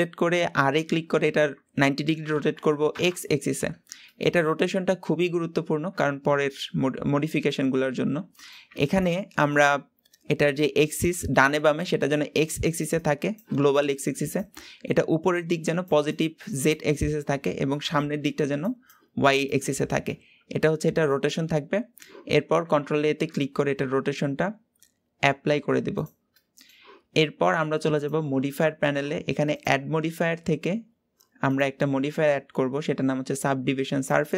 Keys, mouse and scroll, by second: 0.5 r, 4.0-7.1 middle drag, 7.9-19.5 middle drag, 20.0-22.8 middle drag, 22.8 ctrl+a, 26.3-27.9 middle drag, 27.9 click, 28.5 middle click, 29.5 click, 30.5-31.5 drag, 34.0 click.